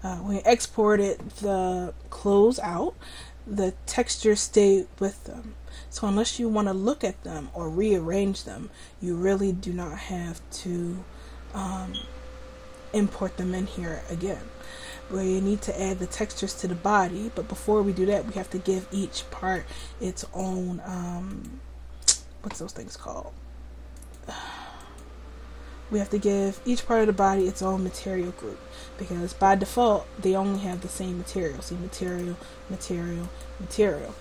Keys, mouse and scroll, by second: 14.7-17.8 right drag, 24.0-25.8 drag, 25.8 middle click, 26.2 click, 30.6-32.2 drag.